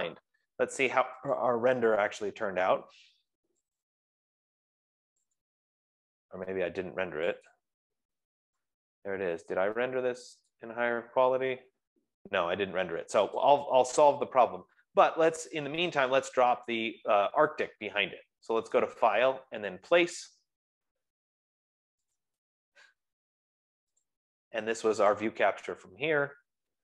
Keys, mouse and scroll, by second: 1.8 click, 4.8 click, 6.1 click, 8.2 click, 13.8 click, 16.9 click, 17.1 click, 19.3 click, 22.5 click, 25.7 click.